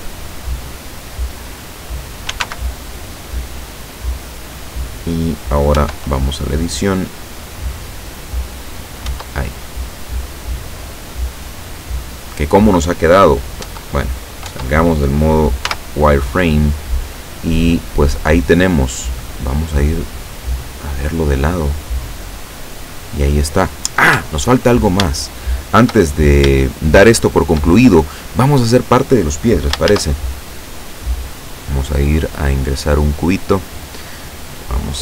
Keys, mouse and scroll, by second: 1.6 click, 2.3 s, 2.4 x, 4.6 click, 5.8 Tab, 7.3-9.1 drag, 9.1 Tab, 9.6-10.4 scroll down 4, 13.7 Tab, 14.6 Tab, 15.8 z, 16.9 scroll down 2, 18.0-18.5 scroll up 2, 19.6-21.6 middle drag, 22.0 middle click, 22.9 middle click, 24.2 KP_7, 25.2 shift+middle click, 26.2-26.6 shift+scroll up 2, 26.7-27.7 shift+middle drag, 30.0 shift+a, 31.6 click, 33.2-33.5 scroll down 2, 34.3-35.0 drag.